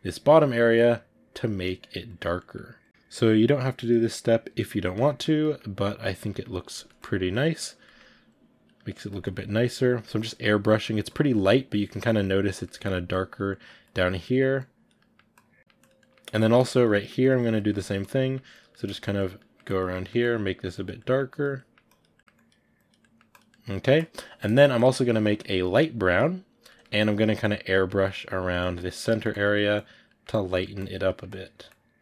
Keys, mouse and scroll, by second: 1.0 middle click, 1.6 click, 2.4-4.1 middle drag, 4.1 click, 4.2 middle click, 5.0 click, 5.0-6.2 shift+middle drag, 6.2 click, 6.3-7.8 middle drag, 7.8 click, 7.8-8.8 ctrl+middle drag, 8.8 click, 8.9 ctrl+middle click, 9.8 click, 9.9 ctrl+middle click, 10.3 click, 10.7 middle click, 11.1 click, 11.2-13.1 middle drag, 13.1 click, 13.4 middle click, 13.8 click, 14.1 middle click, 14.6 click, 14.8 middle click, 15.3 click, 15.6 middle click, 15.7 click, 15.9 middle click, 16.7 click, 16.8 middle click, 17.2 click, 17.4 ctrl+middle click, 18.1 click, 18.2 middle click, 18.6 click, 18.7 ctrl+middle click, 19.1 click, 19.2 middle click, 19.6 click, 19.8 middle click, 20.1 click, 20.5 middle click, 20.7 click, 20.9 middle click, 21.3 click, 21.4 middle click, 21.9 click, 22.0 middle click, 22.4 click, 23.0 middle click, 23.3 click, 23.5 middle click, 23.9-25.3 drag, 26.5-28.0 ctrl+middle drag, 28.0 click, 28.3 middle click, 28.5 click, 28.7 ctrl+middle click, 29.2 click, 29.4 middle click, 29.7 click, 29.9 middle click, 30.2 click, 30.5 middle click, 30.7 click, 30.9 middle click, 31.2 click, 31.8 middle click.